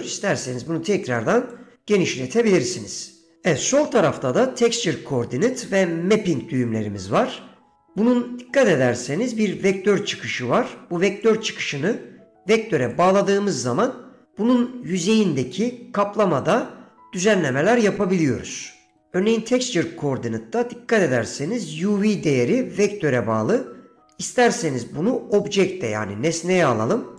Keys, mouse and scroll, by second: 11.4 click, 18.2 middle click.